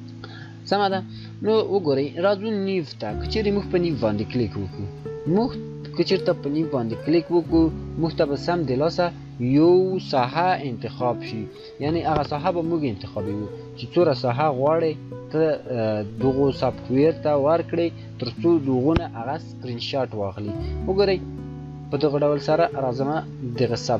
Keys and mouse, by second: 3.4 shift+click, 8.3 shift+click, 14.3-18.4 shift+drag, 21.0 shift+click.